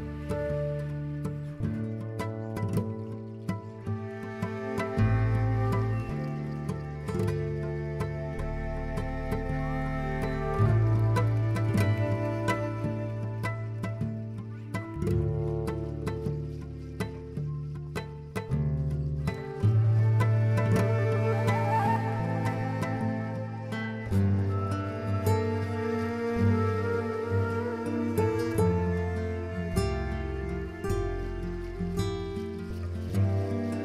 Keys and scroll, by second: 25.6 z.